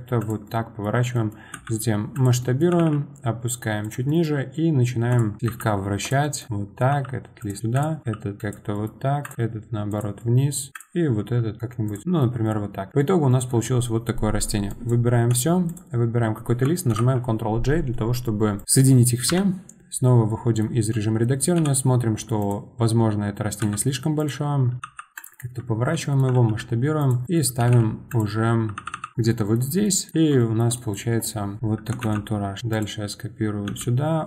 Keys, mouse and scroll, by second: 0.2 r, 0.4-1.5 middle drag, 1.5 s, 2.4 middle click, 4.1 middle click, 4.6-5.1 scroll up 2, 5.1 click, 5.4 middle click, 5.4 r, 6.2 middle drag, 6.5 click, 6.9 r, 7.6 middle click, 7.7 click, 8.0 r, 8.7-9.2 middle drag, 9.2 click, 9.3 r, 10.2-10.7 middle drag, 10.7 click, 11.2 r, 11.9 click, 12.0 middle click, 12.2 scroll down 1, 12.4-13.0 middle drag, 13.0 scroll down 1, 13.3-14.7 middle drag, 14.7 click, 15.7 shift+click, 16.9 ctrl+j, 18.6 click, 18.6 middle click, 19.3 KP_Divide, 20.0 scroll down 2, 20.3-21.6 middle drag, 21.6 KP_7, 22.4 click, 23.6 s, 25.1 r, 25.7-26.0 scroll up 3, 26.0 shift+middle click, 26.5 g, 27.2 middle click, 29.1-29.6 middle drag, 29.6 scroll down 2, 29.8 middle click, 30.1 scroll up 2, 30.4-31.6 shift+middle drag, 31.6 KP_7, 32.0 shift+d.